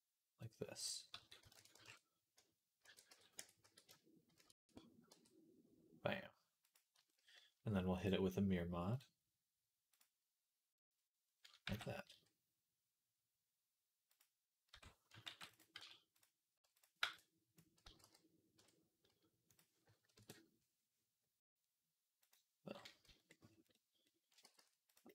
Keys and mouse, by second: 1.0 s, 2.7 ctrl+a, 3.2 Tab, 3.5 a, 4.2 shift+n, 4.5 Tab, 4.9 g, 7.8-14.0 drag, 7.8-14.0 middle drag, 11.5 g, 14.6 Tab, 15.1 ctrl+r, 15.1 ctrl+click, 15.4 middle click, 15.6 z, 16.0 click, 16.0 middle click, 16.6 click, 16.8-19.4 middle drag, 16.8 b, 17.7 x, 18.4 Tab, 19.4-22.1 drag, 22.1-25.1 middle drag, 22.9 z, 24.3 g.